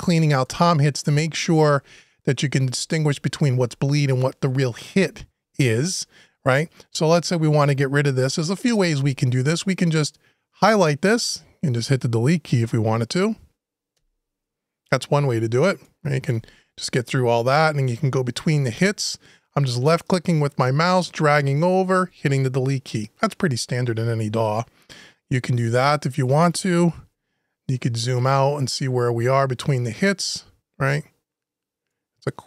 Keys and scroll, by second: 13.7 Delete, 16.1 Delete, 21.8 Delete.